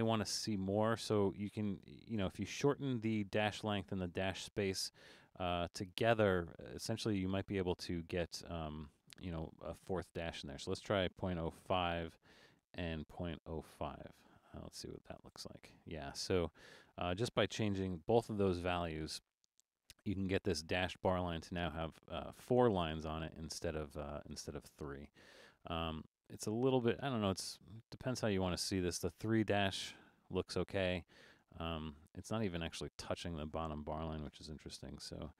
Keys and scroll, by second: 11.9 5, 13.9 5, 18.0 super+=, 18.5 super+=, 27.4 super+z, 34.4 super+=.